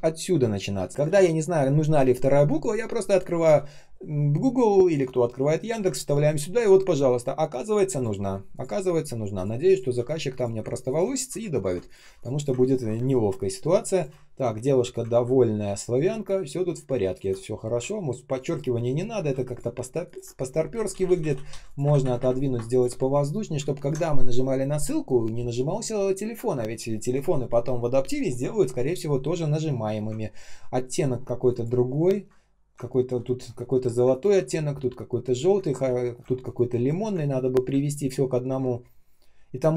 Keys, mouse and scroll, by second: 1.0 ctrl+c, 3.4 ctrl+e, 5.6 ctrl+м, 10.8 ctrl+click, 11.8 ctrl+shift+click, 12.0 alt+p, 12.6-12.9 ctrl+scroll down 1, 12.9 space, 13.4 space, 13.4 space, 15.0 ctrl+scroll down 1, 16.0 space, 16.5 space, 16.5 space, 17.8-18.1 ctrl+scroll up 1, 19.1 ctrl+r, 19.4 ctrl+click, 20.0 ctrl+click, 20.6 Down, 20.8 Down, 21.0 Down, 22.6 shift+click, 23.7 ctrl+scroll down 1, 30.1-30.5 ctrl+scroll up 1, 31.1 ctrl+scroll down 1, 31.4 ctrl+click, 32.8 ctrl+scroll up 1, 33.4 ctrl+scroll down 1, 34.3 ctrl+scroll up 1, 35.3 ctrl+scroll down 1, 35.7 space, 36.2 ctrl+scroll up 1, 36.8 ctrl+scroll down 1, 37.6 space, 38.1 space, 38.1 space.